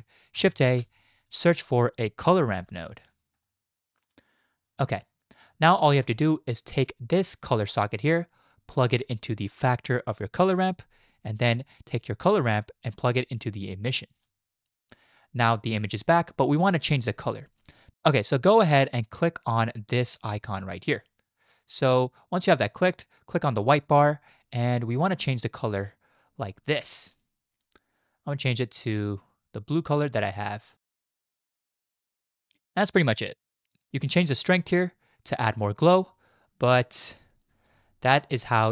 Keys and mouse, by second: 0.6 shift+a, 7.5 click, 7.7-10.7 drag, 12.3-14.3 drag, 17.9 ctrl+z, 20.7-22.5 drag, 34.4-37.7 drag, 38.6 shift+middle click.